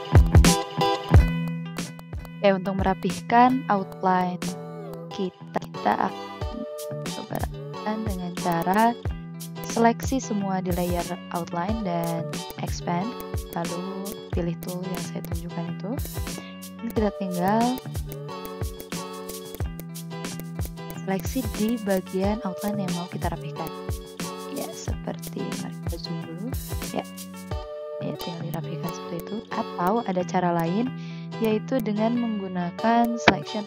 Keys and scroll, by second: 0.7 ctrl+z, 1.0 ctrl+z, 2.8 ctrl+z, 4.0 ctrl+z, 5.5 v, 9.2 ctrl+a, 16.0 ctrl+z, 16.6 v, 17.6 ctrl+z, 19.5 ctrl+z, 20.2 v, 29.6 ctrl+z, 30.8 ctrl+z.